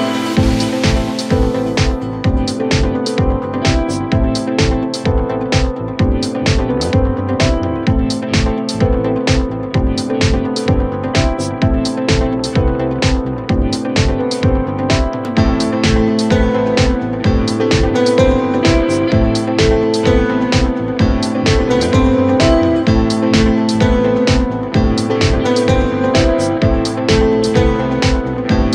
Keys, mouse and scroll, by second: 3.7 ctrl+r, 6.1 Tab, 6.4-6.8 scroll down 6, 6.8-8.5 middle drag, 8.5 click, 13.2 KP_1, 14.0-14.7 KP_2, 17.4 KP_2, 18.9-19.4 scroll down 2, 19.4-21.8 middle drag, 21.8-22.4 scroll up 2, 22.4 KP_1, 22.9 Tab, 23.5 middle click, 24.0-24.7 scroll up 2, 24.7-25.3 scroll up 1, 25.3 KP_7, 26.7 click, 27.7 scroll down 2, 27.9-28.7 middle drag.